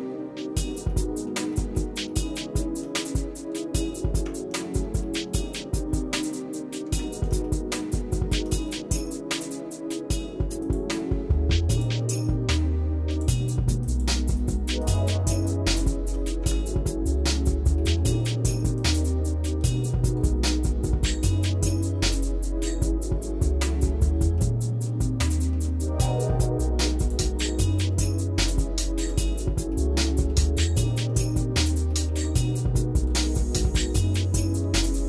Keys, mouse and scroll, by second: 0.1 scroll down 1, 0.4 middle click, 0.9 shift+middle click, 1.5 middle click, 2.1 shift+middle click, 3.1-3.6 scroll up 3, 4.1 Tab, 5.0 shift+middle click, 6.8 Tab, 7.5 shift+middle click, 8.7 middle click, 10.6 click, 11.7 click, 13.2 click, 14.0 click, 14.8 click, 15.8 shift+middle click, 16.4 Tab, 17.1-17.5 scroll down 3, 17.5 scroll up 1, 17.6 scroll down 1, 17.8 middle click, 18.8 click, 20.1 scroll up 3, 24.4 middle click, 25.3 shift+middle click, 27.1 click, 28.1 shift+middle click, 29.2 middle click, 29.7 shift+middle click, 30.6-31.1 scroll up 2, 31.4 shift+middle click, 31.9 shift+middle click, 32.4 middle click, 33.1-33.4 scroll up 2, 33.7 shift+middle click, 34.8-35.0 shift+middle drag.